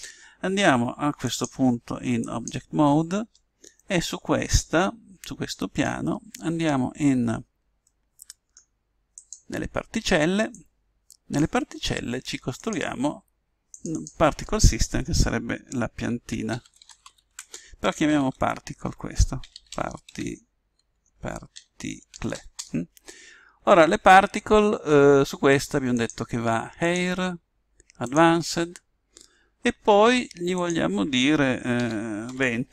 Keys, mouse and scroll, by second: 2.5 click, 3.7-5.5 middle drag, 5.5 middle click, 7.8-9.1 middle drag, 9.1-12.3 drag, 12.5-15.8 drag, 21.3 BackSpace, 25.9 click, 28.0 click, 30.5 click.